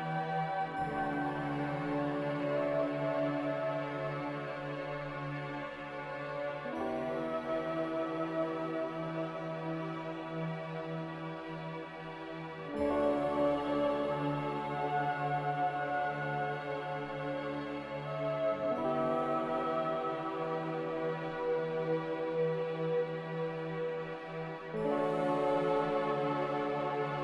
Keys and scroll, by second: 9.6 typing, 11.1 Escape, 15.1 Return, 15.1 1, 15.1 5, 18.9 ctrl+b.